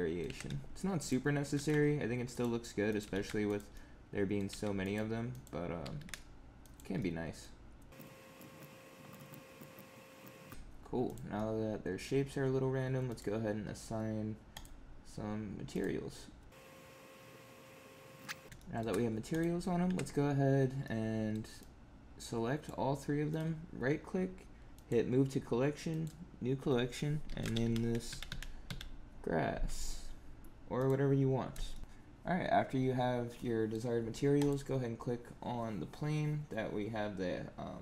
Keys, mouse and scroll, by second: 0.2 Tab, 0.9 click, 1.3 g, 2.8 click, 2.9 g, 3.6 middle click, 4.4 g, 5.2 click, 5.7 g, 6.9 middle click, 7.9 click, 7.9-10.3 typing, 8.3 click, 8.5 click, 8.7 middle click, 9.0 click, 9.1 Tab, 9.1 click, 9.1 Tab, 9.2 click, 9.5 click, 9.7 click, 9.9 middle click, 10.2 click, 10.3 middle click, 10.5 Tab, 11.0 click, 11.3 middle click, 13.0 click, 14.4 click, 15.6 click, 16.5 click, 16.7 click, 17.1 click, 17.3 click, 17.5 click, 17.7 click, 17.9 click, 18.1 middle click, 18.2 Tab, 18.2 middle click, 18.4 click, 18.5 shift+middle click, 18.8 scroll down 4, 19.2 click, 19.8 Tab, 20.7 middle click, 21.5 click, 23.2 right click, 28.2 s, 31.6 shift+middle click, 31.8 click, 33.3 middle click, 34.3 click.